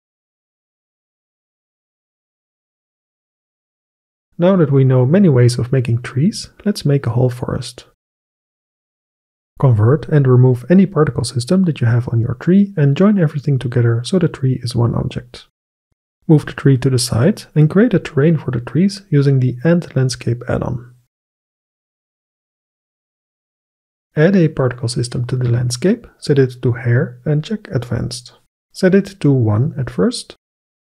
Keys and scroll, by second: 13.4 ctrl+j, 13.8 Delete, 16.2 x, 17.1 shift+a, 21.8 KP_0, 21.8 KP_2, 22.1 Return, 29.4 KP_1, 29.4 Return.